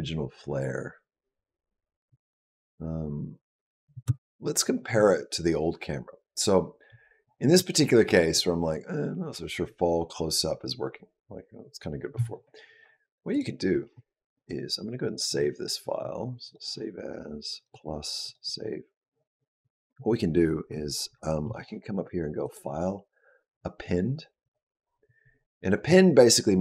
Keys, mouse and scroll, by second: 3.7 space, 7.6-11.3 scroll up 6, 13.1 click, 15.0 click, 22.2 click.